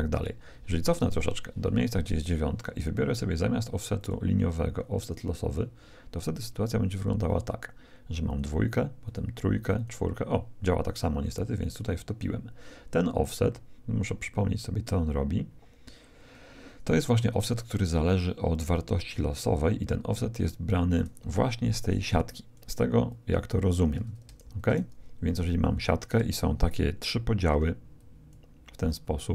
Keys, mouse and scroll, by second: 0.9-3.0 drag, 4.0-5.6 drag, 7.2-11.4 drag, 21.6-23.9 d, 22.2-24.8 drag, 24.4 shift+z, 27.6-29.3 d, 28.0-29.3 drag.